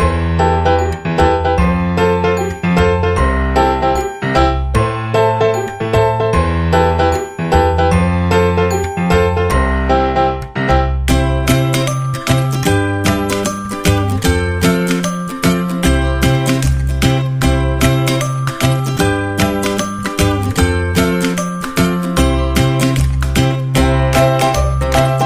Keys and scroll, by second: 2.3 ctrl+=, 6.3 ctrl+-.